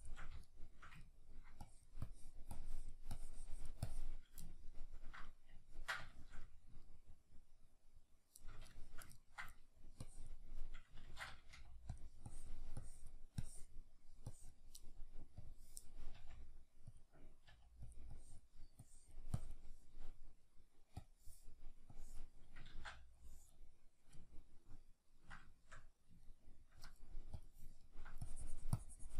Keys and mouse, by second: 0.5-1.7 shift+middle drag, 1.7-4.5 drag, 4.5-10.0 ctrl+middle drag, 10.0-12.0 drag, 11.0 ctrl+z, 11.6 f, 16.2 f, 17.0 click, 17.5 f, 18.0 click, 22.7 ctrl+z, 22.7-24.3 drag, 24.3-28.3 ctrl+middle drag, 28.3-29.1 drag.